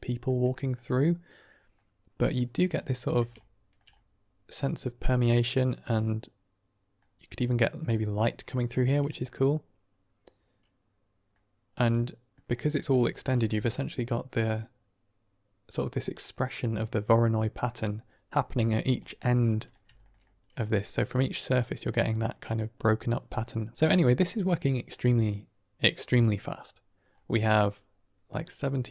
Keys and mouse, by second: 0.4 shift+click, 0.8-1.3 middle drag, 1.6-2.3 middle drag, 2.7-3.1 shift+middle drag, 3.3-3.7 ctrl+middle drag, 4.0-4.6 middle drag, 5.4-6.9 middle drag, 7.3-8.0 middle drag, 8.7 shift+middle click, 9.0-11.3 middle drag, 12.0 middle click, 18.9-19.6 middle drag, 19.9 shift+middle drag, 20.1-20.7 middle drag, 21.0-21.4 middle drag, 22.6-23.5 middle drag, 23.8 middle click, 27.1 middle click.